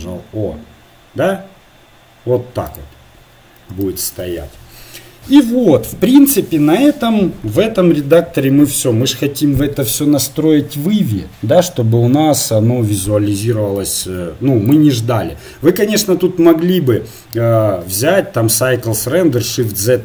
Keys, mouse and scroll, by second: 15.4 ctrl+s.